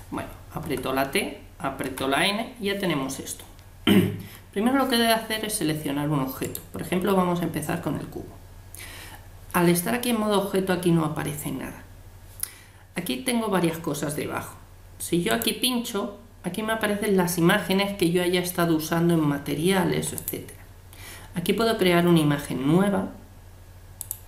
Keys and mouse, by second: 0.6 t, 1.8 n, 6.4-8.2 right drag, 15.3-17.0 drag, 24.0-24.2 drag.